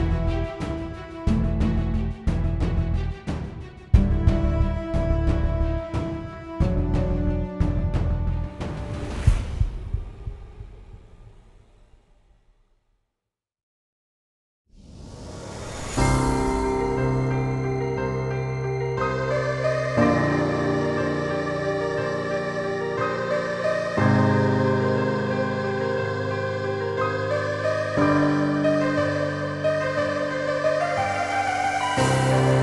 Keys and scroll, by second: 2.6-4.6 typing, 21.7-23.2 typing, 23.3 Tab, 24.5-27.4 typing.